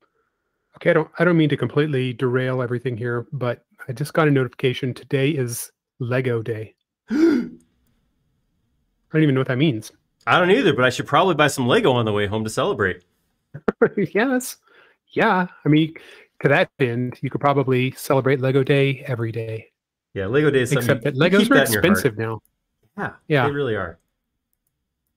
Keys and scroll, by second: 1.4 space, 14.4 m, 18.6 q, 21.5 space, 22.1 q, 24.1 Escape.